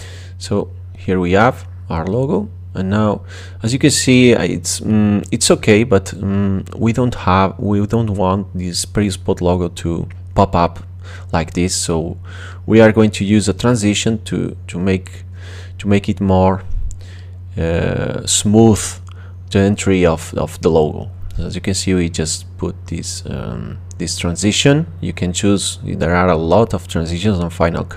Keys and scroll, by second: 4.4 space, 8.5 space, 18.8 space, 22.5 space.